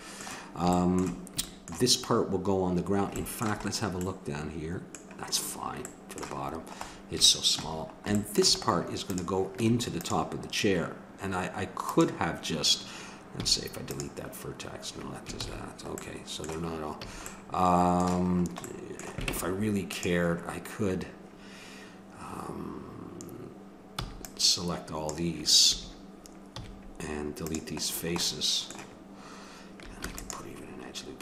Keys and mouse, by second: 5.0-8.3 middle drag, 9.0-10.9 drag, 9.6 Tab, 11.9-13.5 drag, 13.4 x, 15.4 ctrl+z, 16.0 middle click, 17.0 a, 19.3 ctrl+Tab, 24.0 c, 26.5 x, 30.1 ctrl+r.